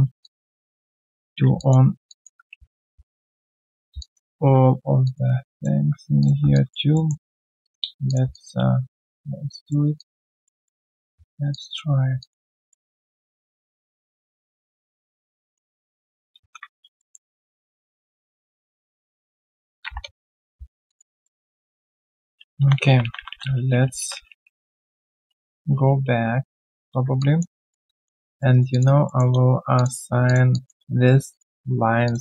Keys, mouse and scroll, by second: 0.2 alt+click, 1.1 1, 1.5 alt+click, 2.0 alt+click, 2.5 ctrl+z, 2.9 ctrl+z, 4.0 alt+click, 5.0 shift+click, 6.5 alt+click, 7.6 shift+click, 8.3 alt+click, 9.0 shift+click, 9.9 alt+click, 10.4 alt+middle click, 10.8 alt+click, 11.5 shift+click, 12.2 alt+click, 12.7 alt+middle click, 12.9 alt+scroll down 1, 13.2 alt+click, 16.9 alt+middle click, 17.2 alt+right click, 19.6-20.3 typing, 20.6 Return, 20.8 alt+click, 21.2 alt+middle click, 21.4 alt+click, 21.8 alt+middle click, 22.6-24.0 ctrl+z, 27.1 alt+click, 27.6 alt+right click, 27.8 alt+click, 28.2 alt+middle click, 28.5 alt+right click, 28.7 alt+click, 29.0 alt+middle click, 29.7 shift+click, 30.5 alt+click.